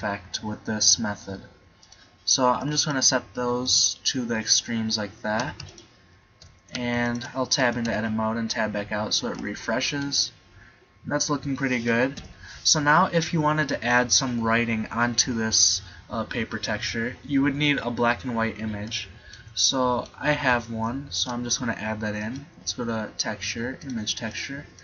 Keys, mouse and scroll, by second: 1.9 right click, 7.7 Tab, 7.9 Tab, 12.2 KP_7, 18.9-21.2 middle drag, 21.2 shift+a.